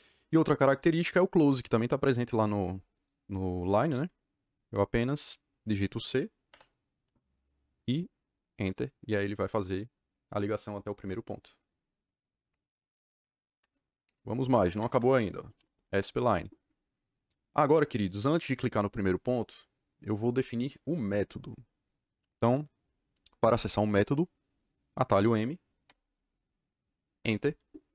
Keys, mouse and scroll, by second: 0.2 click, 0.7 click, 1.0 click, 2.9 click, 6.4 c, 8.5 KP_Enter, 14.5 Escape, 14.6 Escape, 14.8 Escape, 15.2-16.1 typing, 25.8 m, 27.1 KP_Enter.